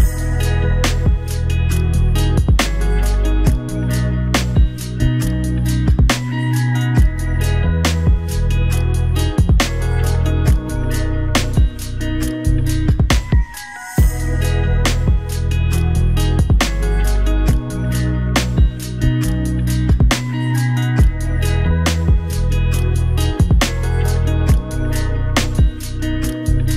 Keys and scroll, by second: 1.1 ctrl+=, 9.0 ctrl+=, 26.3 ctrl+j.